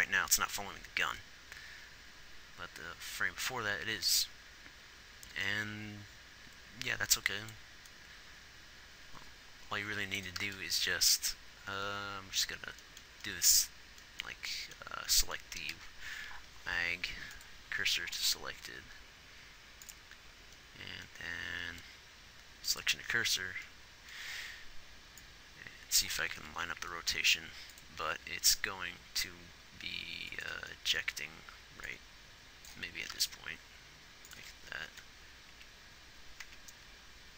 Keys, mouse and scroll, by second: 8.3-10.8 drag, 10.8 shift+s, 22.0 shift+s, 26.6 r, 28.5 g, 35.5 Left, 35.9 Right.